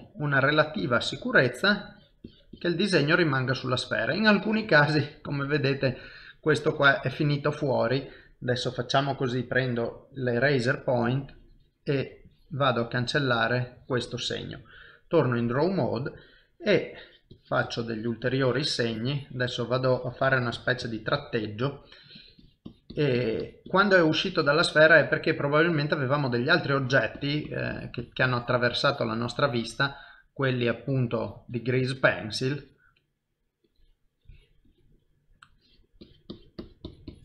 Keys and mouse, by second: 1.1 middle click, 1.9 click, 2.3 click, 2.9 middle click, 4.3 click, 5.3 click, 5.6 middle click, 6.3 middle click, 9.2 click, 11.2 ctrl+click, 12.3 click, 13.0 middle click, 14.5 click, 16.5 click, 17.9-21.4 click, 21.4 middle click, 22.2 click, 25.0 click, 25.5 middle click, 26.9 click, 28.0 click, 28.5 click, 29.5 click, 30.0 middle click, 31.0 click, 33.7 click, 34.2 click, 35.0 middle click, 35.6 click, 36.0 click.